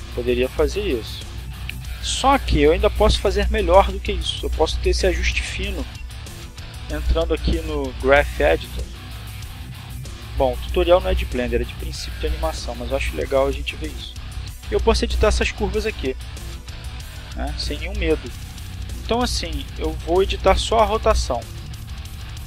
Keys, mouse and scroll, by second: 2.7 click, 5.0 click, 5.9-6.5 scroll up 2, 6.7 shift+middle click, 7.8 click, 8.3 middle click, 9.0-9.4 scroll up 2, 9.6-10.6 shift+middle drag, 10.6 shift+scroll up 2, 11.3-12.3 shift+middle drag, 13.9 middle click, 16.7 click, 18.4 click, 20.3 click, 22.2 click.